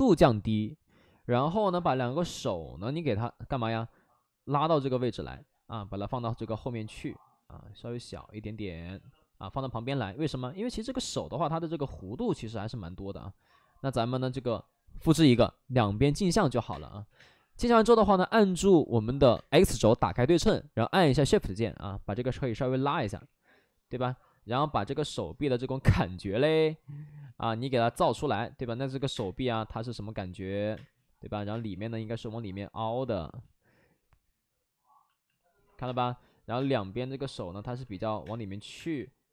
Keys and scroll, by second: 0.4 w, 14.4 2, 16.6 space, 17.0 2, 17.1 space, 18.0 x, 19.3 space, 22.9 3, 23.1 3, 28.9 ctrl+z, 29.0 space, 30.7 space, 33.0 space, 35.8 space, 36.5 space, 38.2 space, 38.7 space.